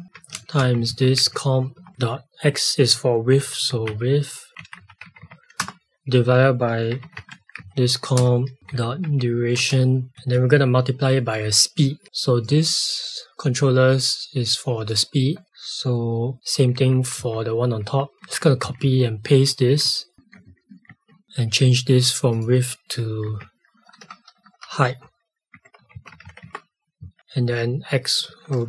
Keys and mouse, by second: 12.4 click.